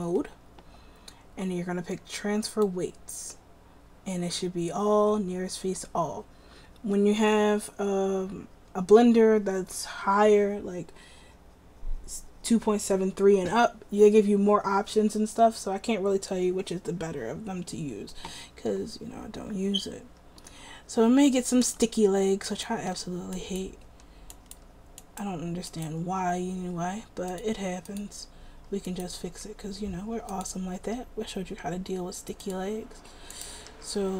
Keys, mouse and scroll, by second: 20.1-20.6 middle drag, 29.4 drag, 29.4 r, 30.3-30.8 right drag, 30.9 r, 33.8 r.